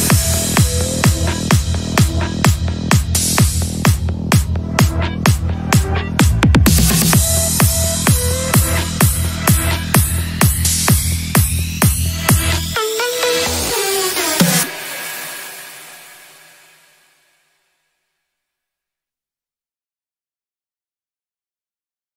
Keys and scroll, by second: 3.7 F3, 9.2 c.